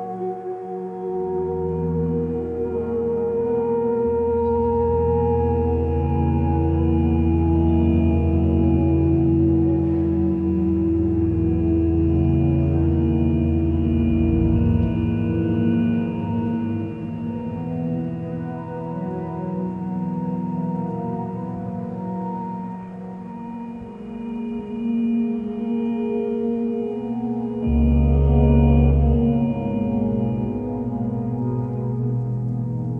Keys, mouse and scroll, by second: 0.2 x, 1.8 x, 3.1 x, 5.8 ctrl+space, 7.4 ctrl+space, 25.1 ctrl+space.